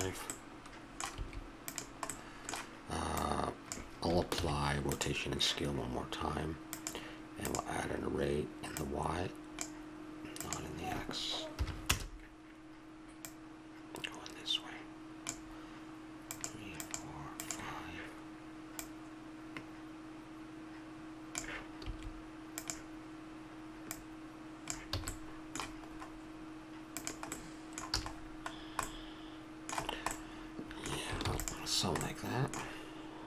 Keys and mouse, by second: 0.3 middle click, 1.2 s, 3.2-4.3 drag, 4.3 ctrl+a, 8.8-12.3 drag, 13.2-15.2 drag, 16.3-20.6 drag, 21.8 s, 23.9-25.6 drag, 25.0 a, 26.9-28.0 right drag, 28.0 a, 28.9 middle click, 29.6 middle click, 31.2 ctrl+s.